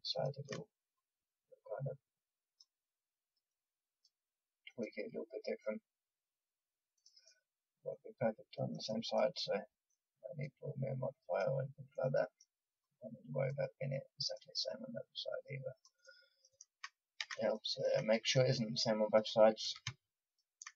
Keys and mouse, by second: 7.4-8.8 middle drag, 9.9-16.2 drag, 16.2 middle click, 16.3 click, 16.3 middle click, 16.4 click, 17.2 a, 19.0-20.7 drag.